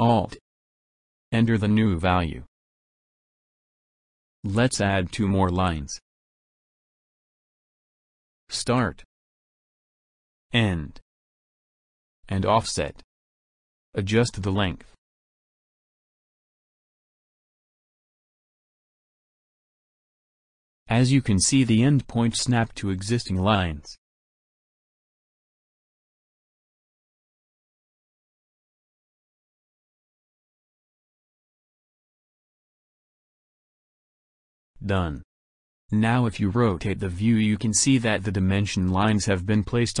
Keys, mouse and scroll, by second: 5.5-7.0 middle drag, 8.3 click, 11.1 click, 12.4 click, 14.5 alt+click, 17.8-18.2 middle drag, 19.0-20.1 middle drag, 22.1 click, 27.1 click, 30.7 click, 32.3-33.7 middle drag, 34.9-35.6 ctrl+scroll down 3, 36.4-37.1 middle drag, 37.3-40.0 drag.